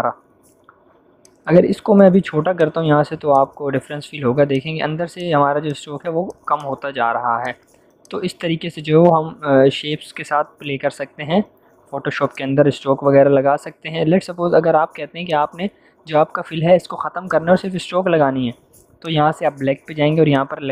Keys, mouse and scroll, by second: 10.2 m, 11.6 u, 12.3-13.5 shift+drag, 14.1 v, 15.2-19.0 drag, 17.5 click.